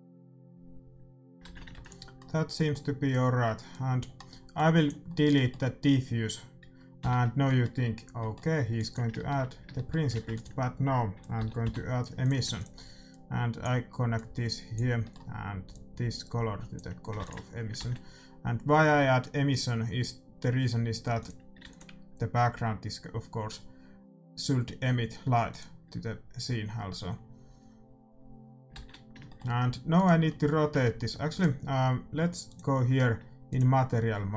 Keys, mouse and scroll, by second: 1.5 shift+z, 1.7 ctrl+s, 2.8-4.2 middle drag, 3.7-6.4 drag, 6.1 middle click, 7.0 x, 8.7-10.7 drag, 10.1 shift+a, 10.8 middle click, 13.1-17.5 drag, 15.0-17.1 middle drag, 17.1 ctrl+s, 17.5-19.3 middle drag, 19.3 shift+z, 19.6-23.1 drag, 21.8 ctrl+s, 26.0-27.4 drag, 28.8 shift+z, 29.0-31.3 middle drag, 29.9-33.4 right drag, 32.4-34.3 drag.